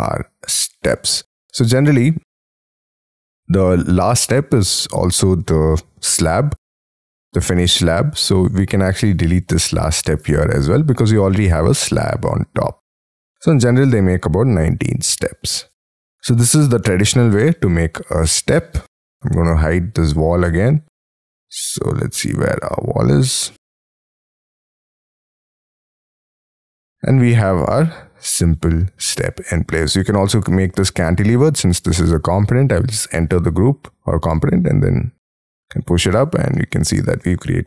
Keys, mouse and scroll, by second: 1.3 scroll up 2, 1.6-2.3 scroll down 11, 2.3 middle click, 2.8 middle click, 3.4-4.6 scroll up 25, 8.4 scroll down 3, 9.0 double click, 9.4 double click, 10.3 Delete, 11.9-12.9 scroll down 14, 12.9 middle click, 15.8 Escape, 16.0 scroll up 4, 16.7 scroll up 1, 16.9 middle click, 18.8-19.4 scroll down 2, 19.9 scroll down 4, 20.8-21.5 scroll up 7, 21.7-22.5 scroll down 4, 22.9 scroll down 3, 26.9 middle click, 28.9-30.1 scroll up 14, 30.1 double click, 30.4 double click, 30.9 middle click, 31.9 double click, 32.9 scroll up 4, 33.5 p, 36.0 middle click, 36.5-37.6 scroll down 19, 36.8 Escape, 37.2 Escape.